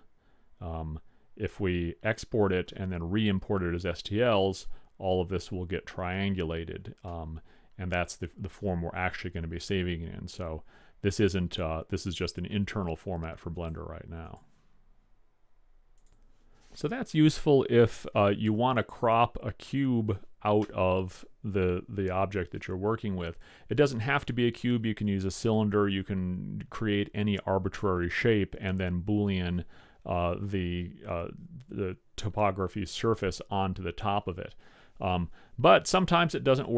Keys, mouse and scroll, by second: 7.2-9.0 middle drag, 14.0 click, 14.8 click, 15.5 middle click.